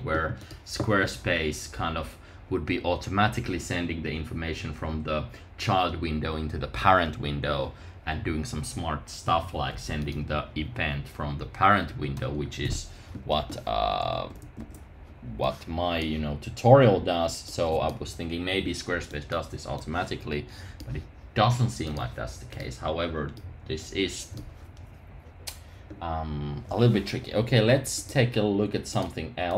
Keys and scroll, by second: 14.0 super+§.